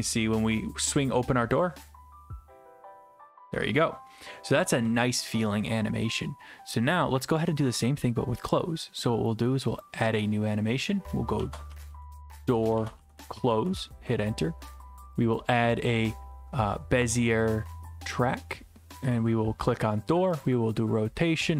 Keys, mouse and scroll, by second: 1.6 click, 8.5 click, 9.8 click, 11.1-13.9 typing, 15.3 click, 17.4 click, 19.1 click, 20.4 click, 20.6 click.